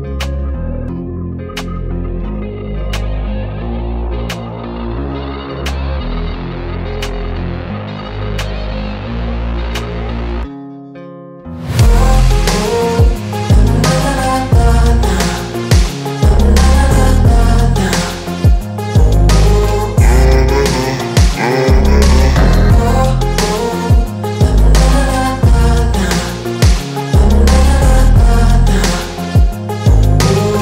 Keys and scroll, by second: 3.1 space, 4.4 Delete, 6.6 m, 9.2 space, 12.4 e, 14.8 space, 15.0 l, 16.5 space, 18.0 m, 19.4 Up, 20.0 Return, 20.3 space.